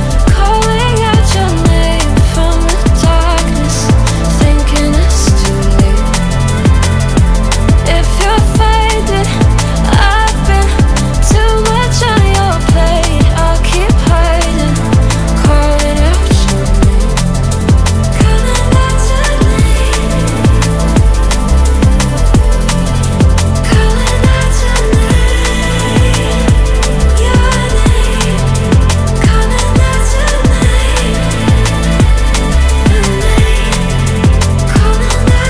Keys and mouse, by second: 4.7 ctrl+z, 7.0 KP_1, 7.8 g, 7.9 x, 9.0-10.5 drag, 9.7 x, 10.6 click, 11.3 s, 11.4 x, 11.8 click, 12.4 x, 13.2 click, 13.5 ctrl+middle click, 14.7 g, 14.7 x, 15.2 click, 17.4 s, 18.6 g, 19.0 x, 21.0 Tab, 21.7 ctrl+r, 23.0 click, 23.5 x, 27.7 shift+z, 28.7 1, 30.0 ctrl+i, 30.8 shift+click, 31.8 shift+click, 32.4 shift+z, 34.3 3, 35.0 shift+z, 35.4 ctrl+click.